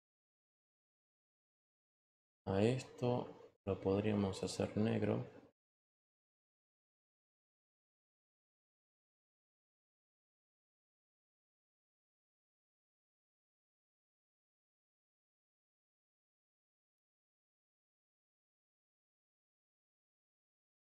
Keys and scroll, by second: 10.0 ctrl+t.